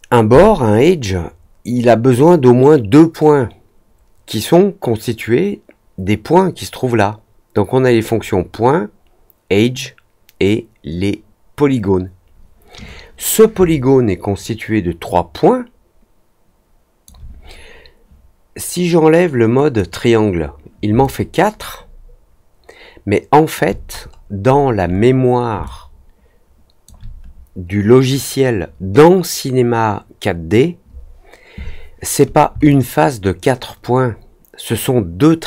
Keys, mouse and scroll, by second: 13.6-17.0 alt+drag, 19.7 click, 21.0-23.5 alt+drag, 24.0 middle click, 24.4 middle click, 24.8 middle click, 25.6-26.8 alt+drag, 32.6-35.4 alt+drag.